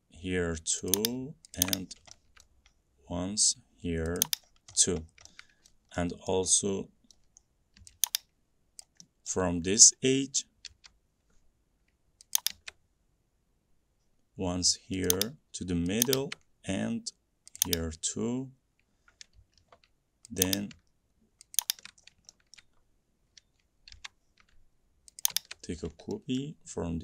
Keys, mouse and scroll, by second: 1.1 click, 1.7 click, 2.0 middle click, 2.0 middle click, 2.8 middle click, 3.0 middle click, 4.4 click, 4.6-5.0 middle click, 4.8 middle click, 4.9 middle click, 5.2 middle click, 5.8 middle click, 6.1 middle click, 6.1 scroll, 6.3 scroll up 1, 6.5 middle click, 7.3 middle click, 7.6 scroll up 1, 7.8 middle click, 9.0 click, 9.7 middle click, 9.7 middle click, 10.8 m, 12.5 click, 14.2 middle click, 14.3 middle click, 15.2 click, 16.2 click, 17.8 click, 22.2 middle click, 22.7 shift+middle click, 24.1 m, 24.4 middle click, 24.5-24.9 scroll, 25.3 scroll, 25.4 click, 26.0-27.0 scroll, 26.5 middle click.